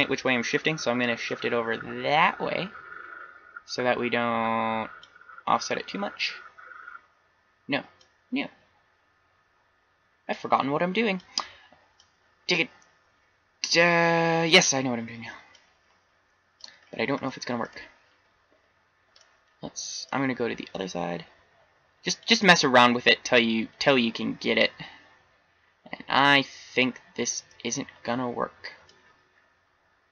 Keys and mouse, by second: 1.4-3.0 drag, 8.0-9.8 drag, 12.0-12.8 drag, 16.8 click, 17.3 middle drag, 20.7-22.6 drag, 24.4-26.4 middle drag.